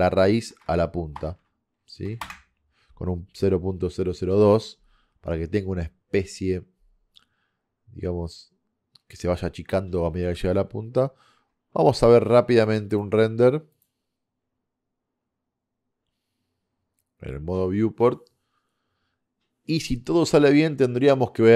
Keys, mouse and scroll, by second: 11.3-11.7 scroll down 1, 12.7-19.6 drag.